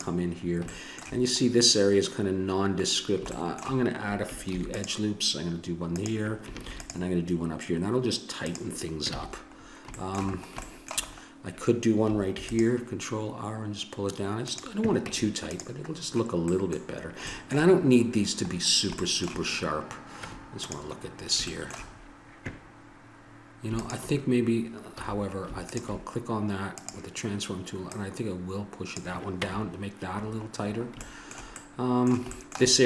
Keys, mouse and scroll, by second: 0.3 middle click, 4.5 ctrl+r, 6.7 ctrl+r, 9.1 a, 12.3 ctrl+r, 15.1 Tab, 20.1 Tab, 23.8-25.6 drag, 25.0 a, 26.0 click, 29.5 Tab.